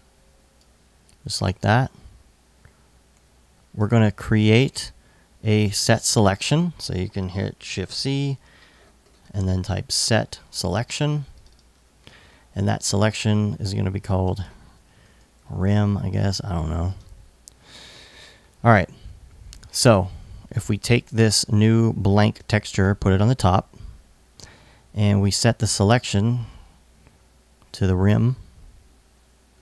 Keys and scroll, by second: 7.4 shift+c, 9.1 s, 9.4 t, 9.8 space, 10.0 s, 14.4-15.5 typing.